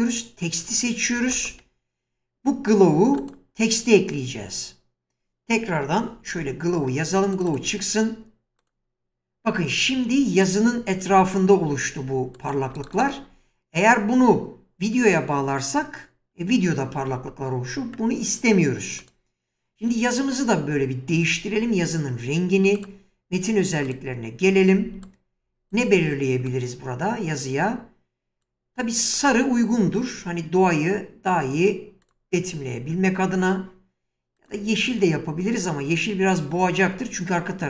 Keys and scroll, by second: 1.3 shift+space, 5.9 BackSpace, 6.4 w, 11.1 <.